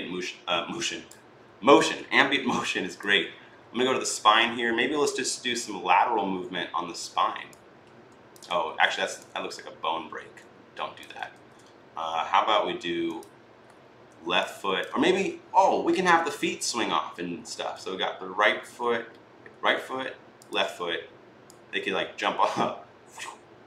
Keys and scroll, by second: 7.3-8.0 typing, 8.5 ctrl+z, 11.1 ctrl+z, 14.8 ctrl+z.